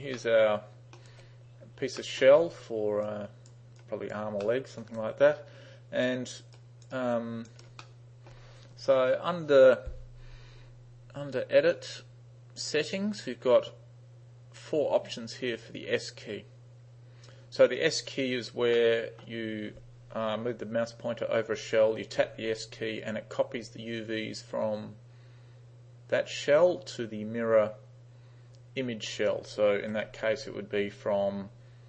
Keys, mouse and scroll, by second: 0.1 space, 0.2-1.1 middle drag, 2.1 middle click, 2.5 space, 3.1-3.5 drag, 3.9-4.2 drag, 4.5-4.9 middle drag, 5.0-6.1 drag, 6.6 right click, 7.0-7.5 right drag, 7.9-8.3 middle drag, 11.7 click, 12.9 click, 18.8-19.3 middle drag, 29.9 3.